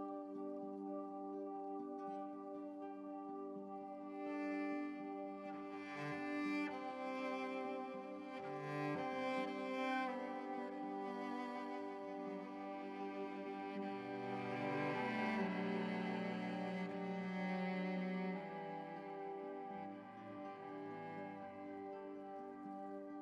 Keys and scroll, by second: 13.0 ctrl+t, 14.1 ctrl+z.